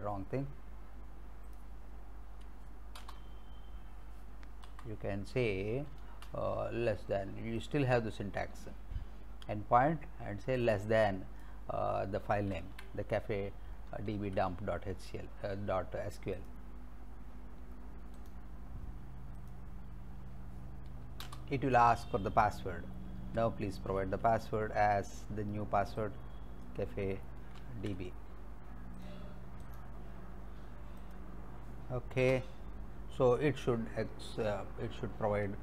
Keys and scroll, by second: 3.0 Return, 4.7 Up, 6.1 space, 12.5 ctrl+c, 14.1 alt+Tab, 21.3 Return, 23.4 alt+Tab, 27.6 ctrl+c, 32.2 Return.